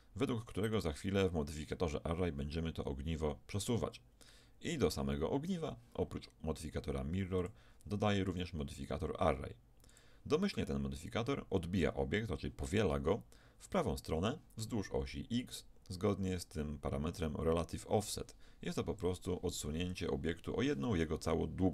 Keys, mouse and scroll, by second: 3.7-6.1 right drag, 7.4-10.5 drag, 15.5-18.5 drag, 19.9-21.7 drag.